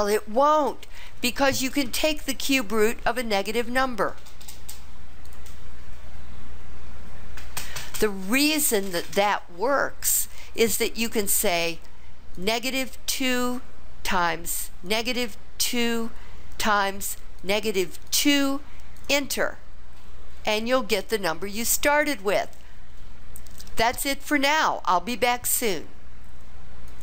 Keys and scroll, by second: 5.3 Return, 13.1 2, 15.7 2, 18.1 2, 19.0 Return.